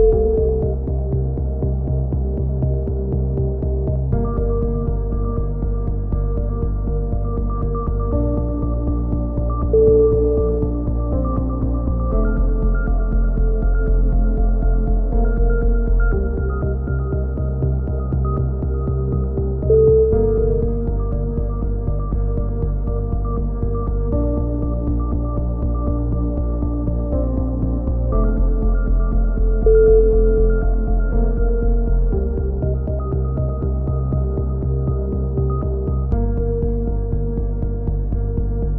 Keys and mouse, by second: 3.0 l, 3.6 click, 4.9 a, 5.4 KP_3, 6.7 KP_7, 7.5 click, 8.2-9.9 middle drag, 9.9 ctrl+r, 12.0 click, 12.3 ctrl+z, 13.8 click, 14.0 b, 15.9 s, 20.0 click, 23.0 a, 25.0 b, 26.8 click, 28.2 ctrl+r, 28.2 a, 32.7-34.4 drag, 33.1 a, 34.4-35.8 middle drag, 34.9 c, 35.8 right click, 36.6 middle click, 37.6 c, 38.4 right click.